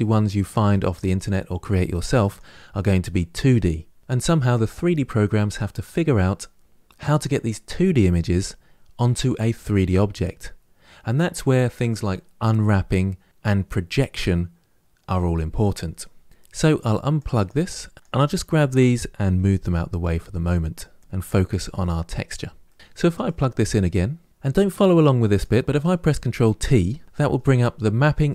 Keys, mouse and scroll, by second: 17.4 click, 20.8 click, 24.3 ctrl+z, 25.6 ctrl+t.